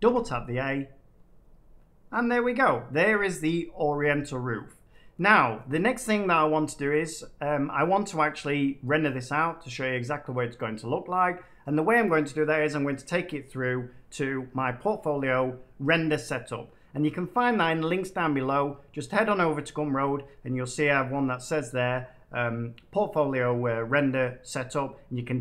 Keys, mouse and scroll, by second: 0.2 a, 2.0 middle click, 2.6 scroll down 2, 2.9 scroll.